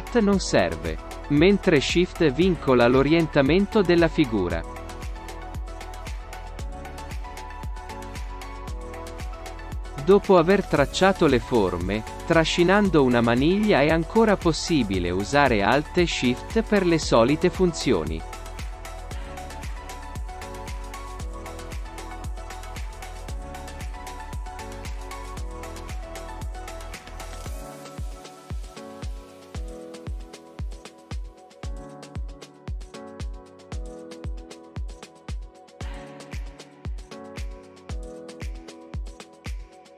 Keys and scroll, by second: 5.7 shift+space.